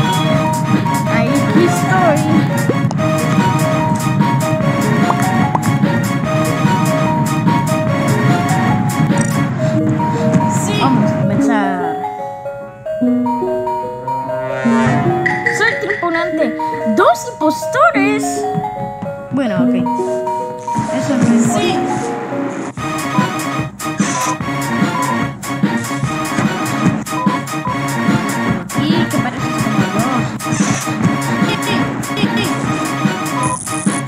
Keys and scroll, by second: 11.4 space, 20.7 space.